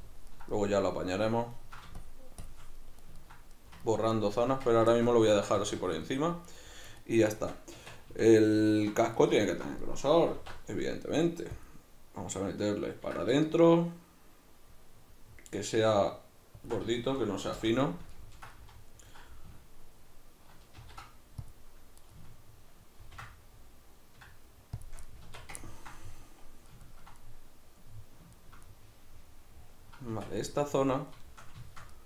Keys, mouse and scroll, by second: 2.0 shift+click, 2.8-6.4 middle drag, 4.5 Tab, 5.6 a, 6.4 right click, 7.0-16.7 middle drag, 7.8 Tab, 8.1 a, 10.3 alt+e, 16.7 shift+click, 16.9 a, 17.6 shift+n, 17.8-22.1 middle drag, 20.8 ctrl+r, 22.1 right click, 23.0 ctrl+b, 24.9 shift+click, 25.1-32.0 middle drag, 25.3 Tab, 30.1 Tab.